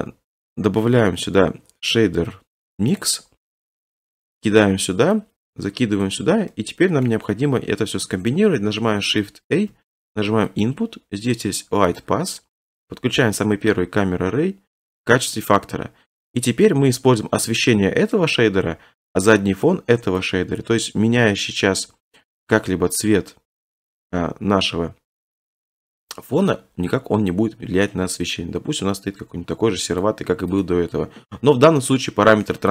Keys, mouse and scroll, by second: 3.0 click, 3.7 click, 6.0 click, 7.0 middle click, 9.5 a, 10.6 click, 12.0 click, 12.8 click, 15.0 click, 16.4 click, 18.1 click, 19.2 click, 30.0 click, 30.6 click.